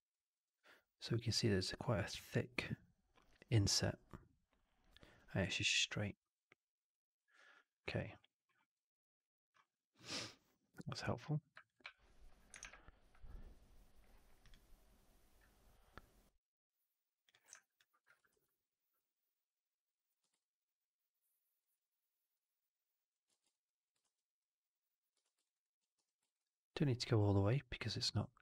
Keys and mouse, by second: 11.1 click, 11.5 alt+click, 11.7 3, 12.5 shift+Tab, 17.4 w, 17.5 alt+click, 18.2 ctrl+e, 19.0-20.0 drag, 20.1 w, 20.3-21.5 alt+drag, 22.3 click, 23.2 ctrl+z, 23.4 alt+click, 23.9 shift+x, 24.3 click, 25.1 shift+x, 25.3 alt+right click, 25.5 alt+click, 25.9 4, 26.1 alt+right drag, 26.3-28.4 alt+drag.